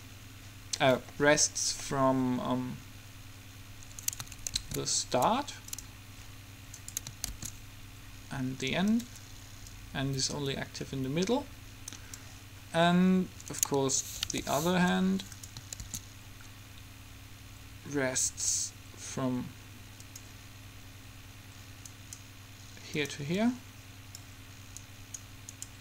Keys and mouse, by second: 4.2-5.9 right drag, 4.7 shift+d, 7.4 shift+d, 9.8-11.8 drag, 13.7-15.8 right drag, 14.4 g, 16.0 shift+d, 22.2-23.4 right drag, 23.4 middle click, 24.0 click, 25.0 middle click, 25.5-25.8 right drag.